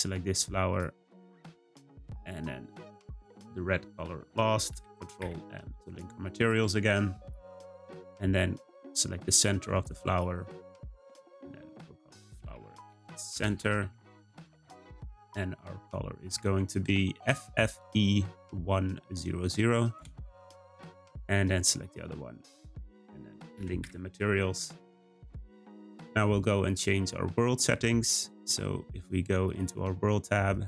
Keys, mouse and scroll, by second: 0.7 shift+click, 1.1 shift+click, 1.5 shift+click, 3.2 shift+click, 4.7 ctrl+l, 6.4 click, 8.7 click, 9.7 click, 10.1-13.4 drag, 13.4 BackSpace, 15.1 click, 21.5 click, 22.5 shift+click, 23.5 ctrl+l, 26.6 click, 29.4 click, 30.5 click.